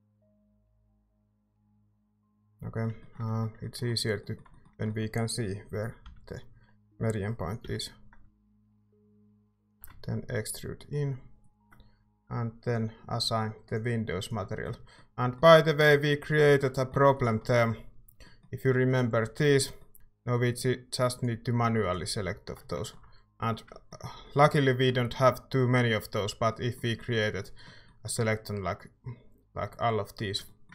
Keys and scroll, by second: 6.0 i, 7.6 i, 9.7 e, 14.7 Tab, 16.5 a, 17.1 ctrl+s, 19.2 Tab.